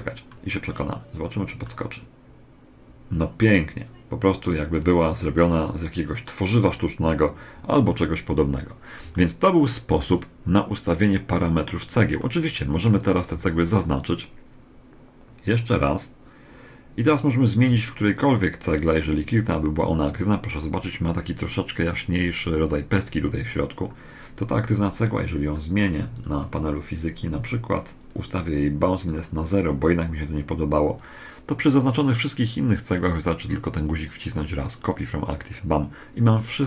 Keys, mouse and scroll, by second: 4.7-6.4 middle drag, 7.1 Escape, 8.9-12.3 middle drag, 13.1 b, 17.9 right click, 25.9 click, 27.9 click, 34.6 click.